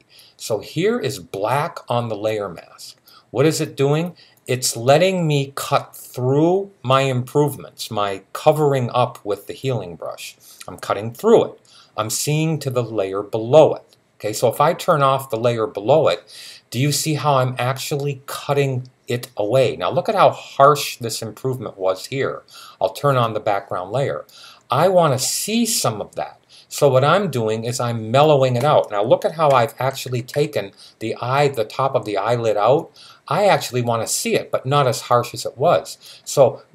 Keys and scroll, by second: 29.3 [, 29.6 [, 29.9 [, 30.2 [.